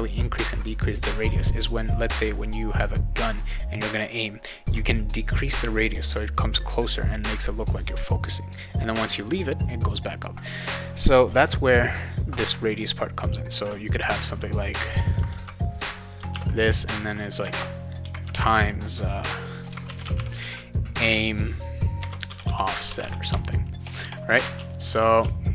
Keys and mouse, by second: 15.1 click, 15.3 shift+9, 16.1 shift+click, 16.3 shift+0, 17.0 click, 17.4 space, 18.2 shift+8, 18.4 space, 19.6-20.6 typing, 21.7-24.0 typing, 24.5 ctrl+s, 25.2 ctrl+s.